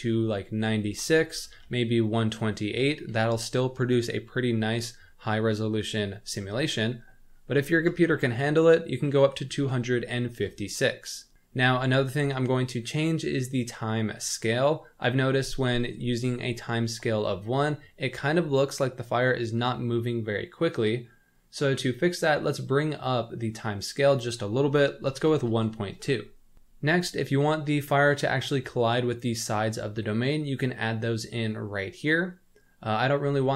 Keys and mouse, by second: 0.0-10.5 drag, 1.6 BackSpace, 8.0 BackSpace, 8.1 BackSpace, 24.0-26.2 drag.